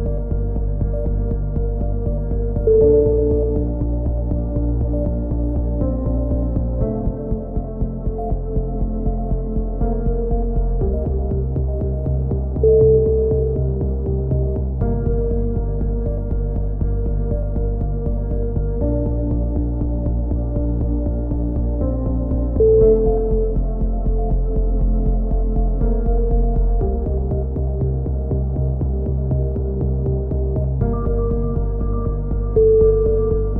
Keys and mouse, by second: 1.4-4.6 middle drag, 2.4 a, 2.6 b, 4.3 g, 6.2 a, 7.3 KP_7, 9.8 z, 10.4 KP_3, 10.8 z, 11.3 click, 19.3 middle click, 21.2 ctrl+r, 23.4 a, 24.6 c, 25.9 click, 26.1 middle click, 26.8 g, 30.8 c, 31.2 click, 31.6 middle click, 32.5 click, 32.6 g.